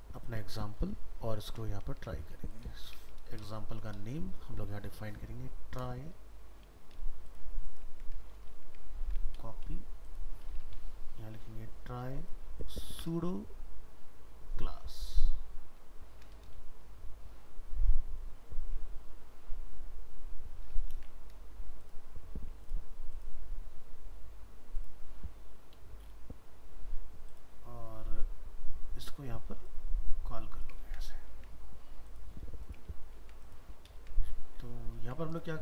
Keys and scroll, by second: 2.0 ctrl+Tab, 2.9 alt+f, 3.0 alt+秎, 8.4 alt+秤, 9.0 ctrl+c, 10.6 alt+f, 10.7 alt+秤, 20.7 ctrl+a, 20.9 ctrl+c, 30.8 ctrl+v, 33.2 ctrl+c, 33.7 ctrl+a.